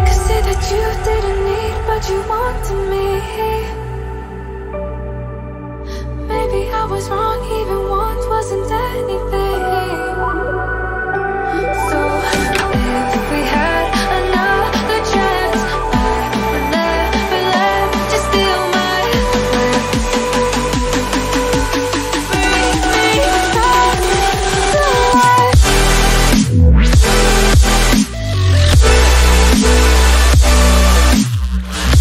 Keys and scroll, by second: 9.7 ctrl+d, 13.9 t, 16.9-17.9 typing, 20.4 shift+7, 22.2-24.2 typing.